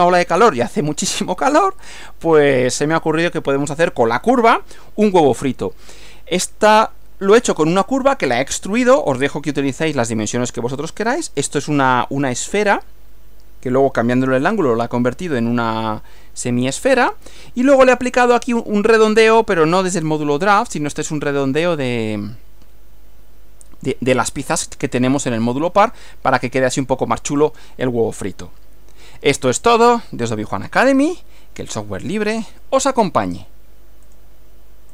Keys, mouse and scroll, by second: 34.1 click.